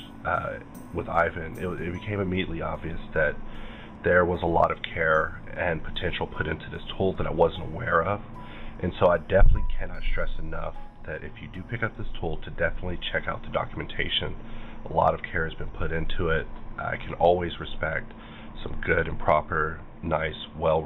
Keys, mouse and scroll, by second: 0.9 scroll down 2, 1.5-2.8 scroll down 7, 3.4-4.4 scroll down 2, 4.4 scroll down 1, 5.5 scroll down 3, 6.2-8.0 scroll down 3, 8.0-9.1 scroll down 2, 9.1 scroll down 1, 12.8-13.2 scroll down 5, 16.5-18.5 scroll down 7, 18.5-18.8 scroll down 1.